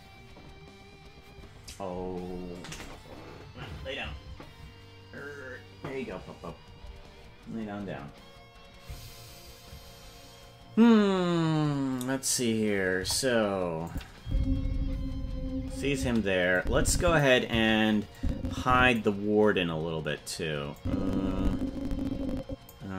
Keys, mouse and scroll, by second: 12.9 KP_0, 13.8 click, 14.2 space, 15.9 space, 16.5 click, 18.1 click, 20.7-22.7 drag.